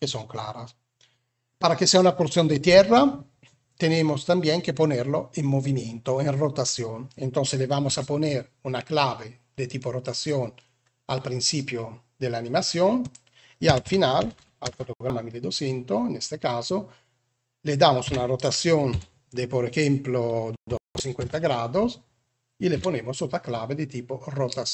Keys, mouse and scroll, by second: 7.7 i, 12.9-14.8 drag, 14.2 0, 17.9 r, 22.6 i.